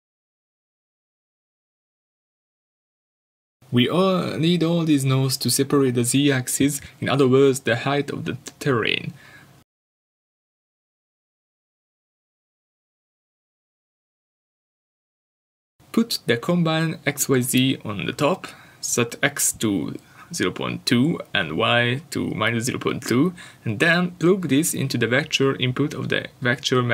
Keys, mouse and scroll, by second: 11.3 click, 21.9 click.